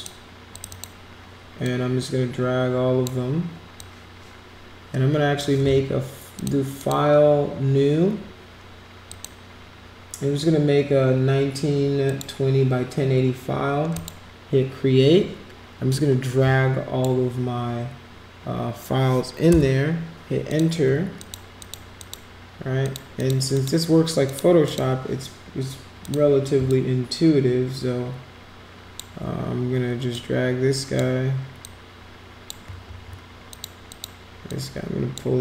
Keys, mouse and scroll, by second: 0.5 click, 0.7 click, 1.6-3.1 drag, 3.8-5.4 drag, 6.3 click, 6.8 drag, 9.1 click, 12.1 click, 13.9 click, 15.9-17.0 drag, 20.5 click, 21.1 click, 21.6 click, 22.0 click, 22.8 click, 23.2 click, 23.5 click, 24.2 click, 24.7 click, 26.0 click, 26.7-29.0 shift+drag, 30.1 click, 31.6 click, 32.9 ctrl+z, 33.5 click, 33.9 click, 34.5 click.